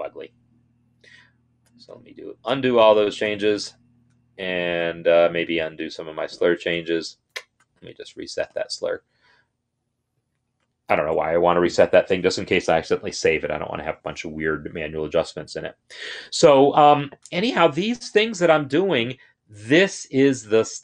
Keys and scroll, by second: 0.8 ctrl+z, 1.3 ctrl+z, 1.4 ctrl+z, 1.5 ctrl+z, 1.7 ctrl+z, 2.3 ctrl+z, 3.0 ctrl+z, 6.6 ctrl+z, 7.1 ctrl+z, 10.7 ctrl+r.